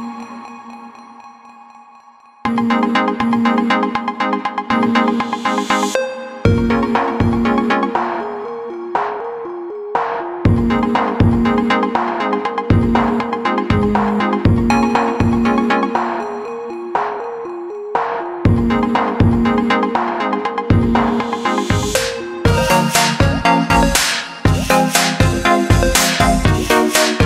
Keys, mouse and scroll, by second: 4.5 click, 11.3 click, 22.9 click.